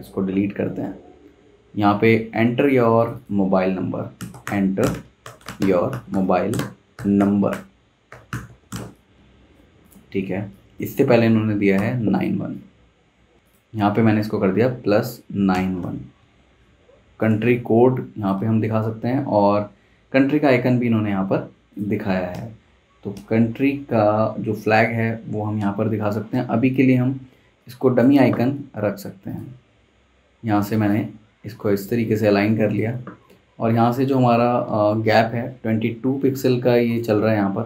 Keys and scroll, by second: 3.9-10.1 typing, 11.8 v, 14.9-15.8 typing, 16.2 Escape, 22.3 super+Tab, 23.1 super+Tab, 24.7 super+Tab, 26.3 super+Tab, 27.2 z, 28.3 v, 33.0 v.